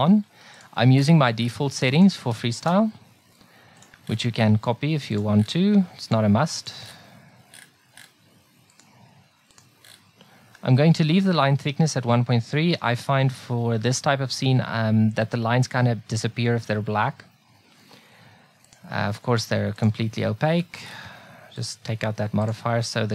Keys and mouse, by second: 6.7-10.8 drag, 21.6-23.1 drag.